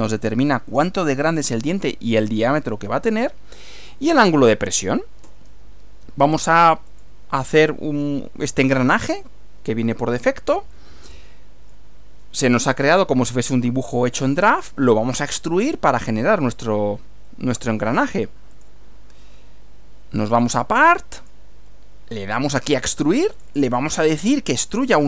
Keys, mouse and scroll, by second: 6.9 click, 10.8-11.9 middle drag, 15.2 click, 17.8 click, 18.5 click, 20.4 click, 21.2 click, 22.2 click, 23.4 click, 23.9 click, 24.7 click.